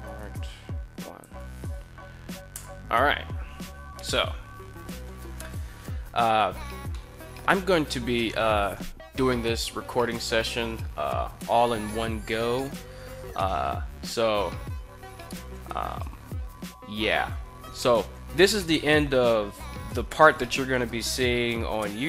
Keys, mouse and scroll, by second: 4.7 KP_1, 6.7 middle drag, 7.5 KP_1.